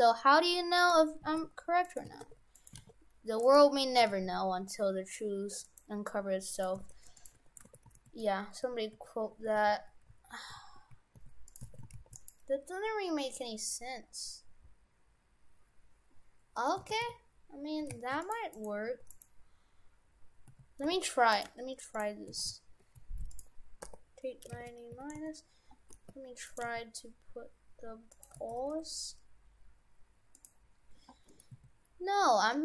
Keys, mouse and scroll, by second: 0.9-2.8 typing, 4.0 s, 6.6 right click, 6.8 shift+f, 7.4 Tab, 7.7 shift+f, 11.6 shift+f, 13.3-14.2 scroll down 2, 14.2-14.6 scroll up 2, 14.7-15.9 scroll down 2, 15.9-16.3 scroll up 1, 16.6 middle click, 16.8 shift+f, 18.5 right click, 18.9 Tab, 19.1 right click, 19.8-20.5 scroll down 4, 20.5 a, 20.8 r, 21.5 g, 22.4 shift+f, 23.8 r, 25.9 g, 26.6 g, 28.4 g, 31.3 middle click, 32.2-32.6 scroll up 3.